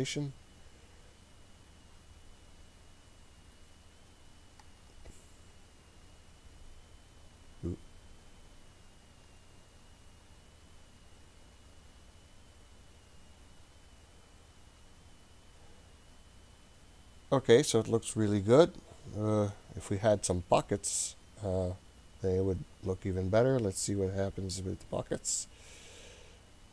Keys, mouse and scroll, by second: 4.7-5.7 drag, 9.3-14.3 drag, 22.4 click.